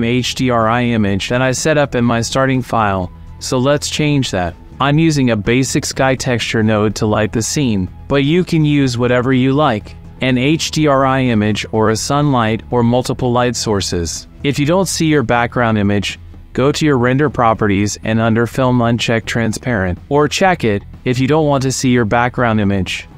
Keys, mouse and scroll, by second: 0.1 n, 0.3 middle click, 0.7 middle click, 1.4 click, 1.9 ctrl+click, 2.2 click, 3.0 Delete, 3.8 shift+a, 5.2 click, 6.3 middle click, 9.0 click, 9.7 click, 10.1 click, 11.2 click, 12.3 click, 13.3 click, 14.0 click, 17.6-20.5 drag, 21.9 click.